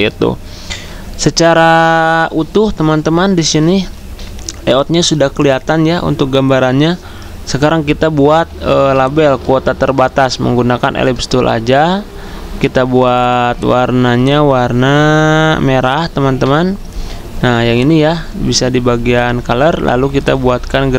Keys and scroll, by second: 8.3 i, 16.4 F6.